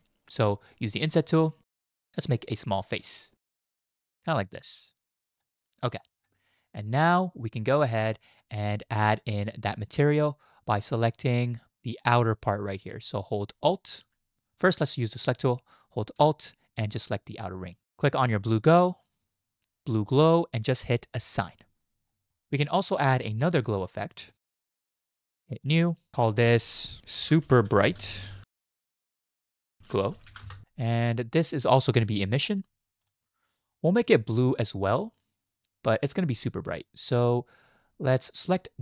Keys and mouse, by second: 0.7 click, 2.6-5.4 drag, 17.3 alt+click, 18.5 click, 21.3 click, 24.0 click, 25.6 click, 26.1 click, 26.3-30.4 drag, 32.0-33.1 drag.